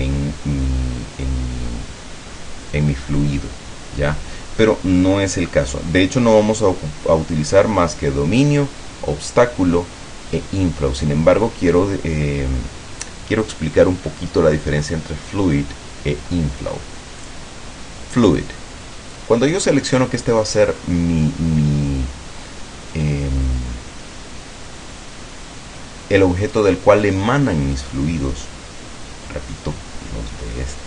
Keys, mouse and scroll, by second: 17.4 click.